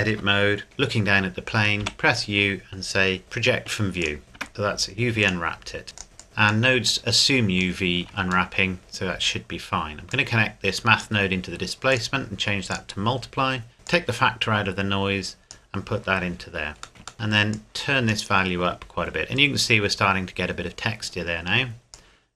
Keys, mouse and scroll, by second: 1.8 u, 4.0 click, 4.4 Tab, 5.2 click, 8.0 scroll up 1, 8.5 shift+middle click, 8.8-9.6 scroll up 1, 10.1 click, 16.7 scroll up 1, 16.9 middle click, 17.5 click, 20.0-21.9 scroll up 1, 21.9 click.